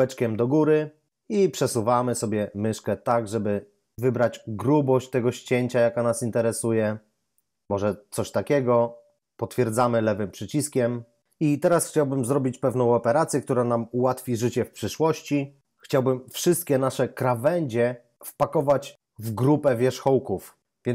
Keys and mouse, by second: 10.4 click.